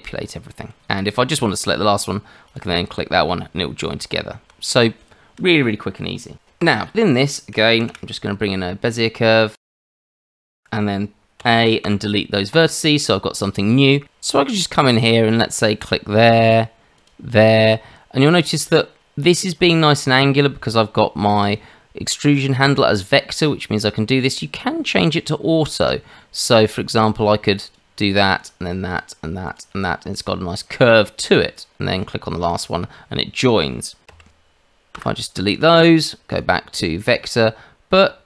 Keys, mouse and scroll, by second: 0.9 click, 2.5 click, 4.1 Tab, 6.6 Delete, 7.8 shift+a, 10.0 Tab, 11.4 a, 11.8 Delete, 14.9 click, 16.9 click, 21.4 click, 25.6 click, 27.4 click, 28.9 click, 29.4 click, 34.0 a, 34.9 Delete, 36.3 click.